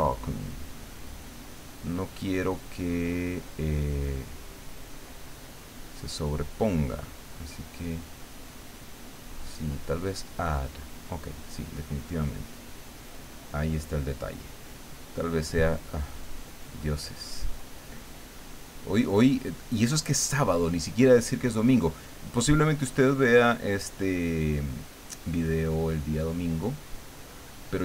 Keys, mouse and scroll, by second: 3.5 click, 6.8 click, 7.3-9.2 drag, 9.3-11.1 drag, 11.4-14.6 drag, 15.1 click, 16.2-20.9 drag, 21.1-27.8 drag.